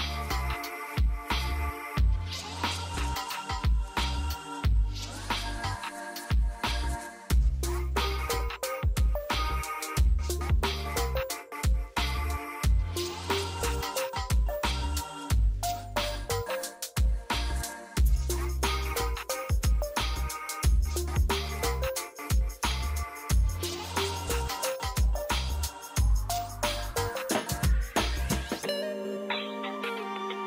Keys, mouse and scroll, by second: 3.7 right click, 4.8 click, 5.2 right click, 6.0 click, 7.6 F2, 8.6-16.7 drag, 16.7 F2, 17.2-23.7 drag, 23.7 space, 26.3 shift+click, 27.0 b, 28.1 click, 28.8 space.